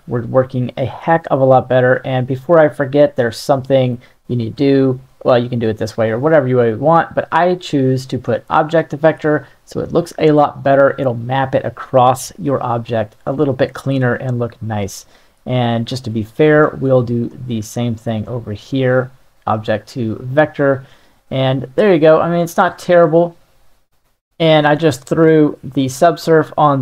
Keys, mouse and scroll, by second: 2.5-3.9 middle drag, 4.9 middle click, 6.8-8.9 drag, 10.4-14.0 middle drag.